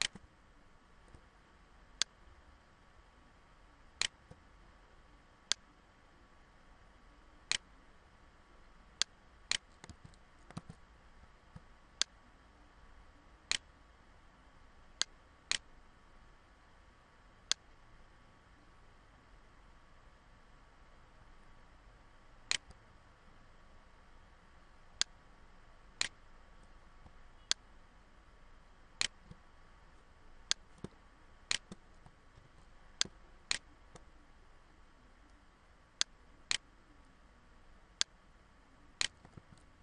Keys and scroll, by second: 9.5 ctrl+z, 31.9 ctrl+-, 39.0 ctrl+z.